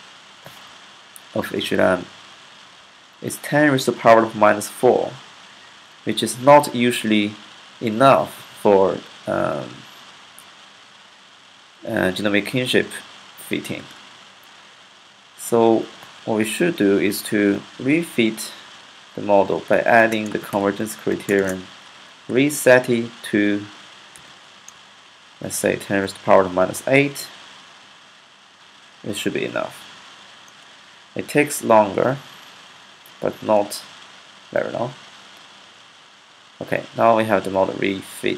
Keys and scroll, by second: 13.6 q, 16.4 Up, 16.5 Up, 17.1 Up, 17.5 Up, 18.0 Up, 19.1 Left, 19.3-22.1 typing, 23.9-24.4 typing, 26.4-27.1 typing.